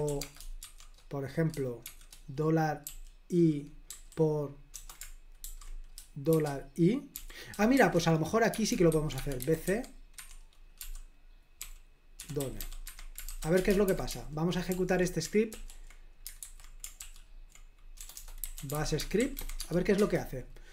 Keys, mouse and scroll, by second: 0.0-2.9 typing, 4.8-13.8 typing, 10.2 Escape, 13.9 super+h, 16.5 super+h, 17.1 ctrl+l, 18.0-20.5 typing.